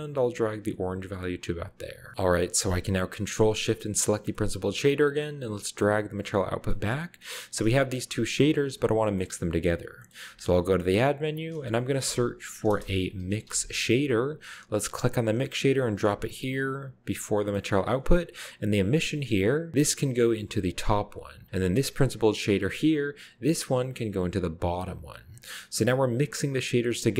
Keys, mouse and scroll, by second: 2.0 scroll down 1, 3.9-4.3 ctrl+shift+drag, 4.3-5.3 scroll down 1, 4.3-5.0 middle drag, 5.4-6.7 drag, 6.7-7.0 middle drag, 7.0-7.6 scroll down 1, 7.8-8.5 ctrl+shift+drag, 9.1-11.0 middle drag, 11.3 middle click, 12.5-13.5 typing, 15.0 click, 17.2 drag, 17.6-18.2 middle drag, 17.8-18.2 scroll up 1, 18.6 click, 20.5-21.9 drag, 23.5-24.6 drag, 26.7-27.1 scroll down 1, 27.0 middle click.